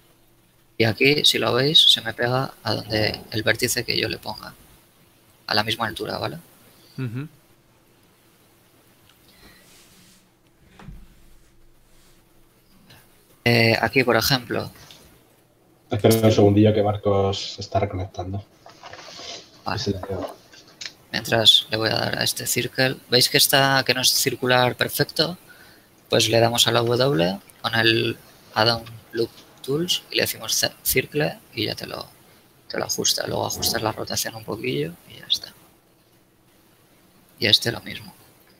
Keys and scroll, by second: 6.8 a, 10.2 ctrl+alt+Tab, 11.1 Tab, 14.8 ctrl+alt+Tab, 19.5 w, 26.5 w, 32.1 r, 32.8 z, 38.2 z.